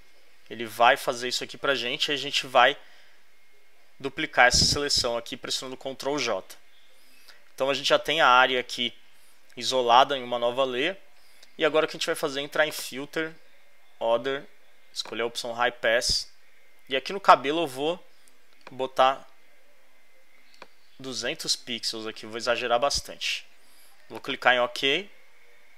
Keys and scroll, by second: 5.7 super+j.